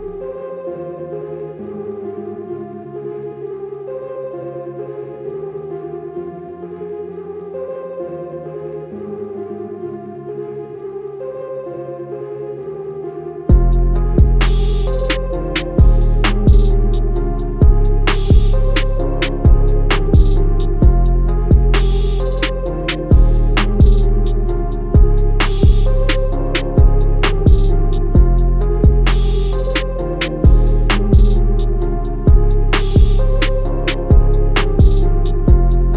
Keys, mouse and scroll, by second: 1.1 alt+scroll up 1, 2.3 alt+scroll up 1, 3.3 click, 9.6-10.2 alt+scroll down 2, 11.0-12.1 alt+scroll down 2, 12.1 click, 15.9 i, 16.7 click, 17.0 a, 18.4 click, 18.8 i, 22.5 a, 22.9 click, 26.3 click, 31.0 space, 31.3 scroll up 1, 31.5 space, 31.6 space, 32.1 scroll down 1, 33.7-34.3 alt+scroll up 2, 35.5 click, 35.8 scroll up 1.